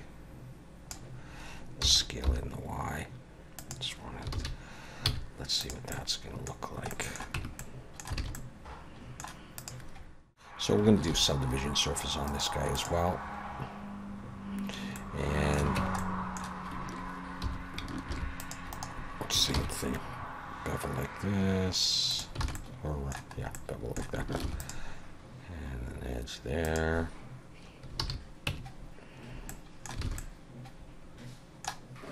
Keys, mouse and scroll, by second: 1.8 s, 4.3 alt+a, 5.1 z, 5.9 middle click, 6.6 scroll down 1, 6.9 middle click, 7.3 Tab, 7.6 middle click, 8.2 alt+a, 8.3 middle click, 9.6 click, 9.8 click, 11.1 ctrl+2, 12.3 right click, 14.9 middle click, 15.8 Tab, 16.0 middle click, 17.4 2, 18.1 ctrl+r, 19.6 ctrl+b, 22.4 alt+a, 22.6 middle click, 23.4 scroll up 1, 23.5 middle click, 24.4 ctrl+r, 28.0 alt+a, 28.5 Tab, 29.5 middle click, 30.1 alt+a, 30.2 middle click.